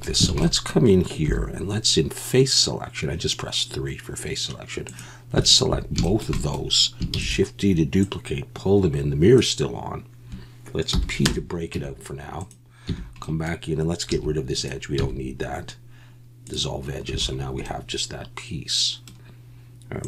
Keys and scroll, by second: 0.3 alt+a, 1.3 3, 7.1 shift+d, 10.9 p, 11.7 Tab, 12.9 Tab, 14.1 2, 15.0 x, 17.1 a.